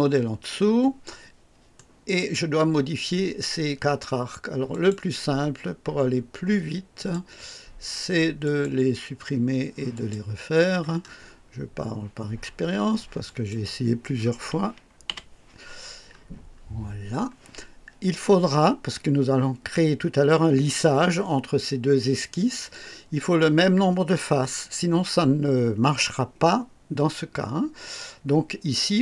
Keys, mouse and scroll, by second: 1.7 right click, 4.7 click, 6.9 click, 8.4 click, 9.9 click, 11.0 scroll up 1, 13.2 click, 15.0 Delete, 15.6-16.4 scroll down 2, 16.5 scroll up 1, 16.9 scroll down 1.